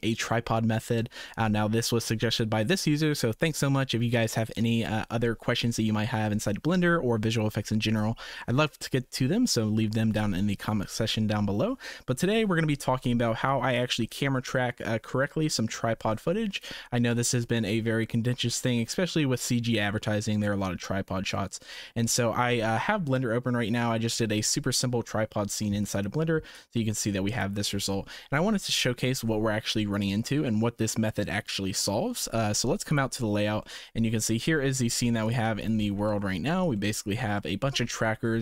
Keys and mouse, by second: 13.7-16.6 drag, 18.5 space, 18.7 space, 19.5 space, 22.1 space, 26.5-27.4 drag, 32.9 click, 33.6-34.2 middle drag, 34.8 shift+middle click, 35.2 click, 35.4 x, 36.0 shift+middle click, 36.7 middle click, 37.3 shift+middle drag.